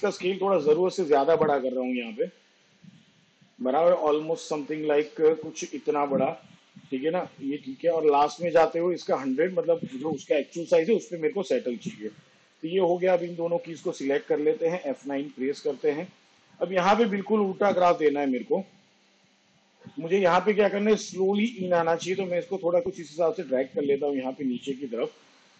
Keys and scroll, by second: 14.9 F9.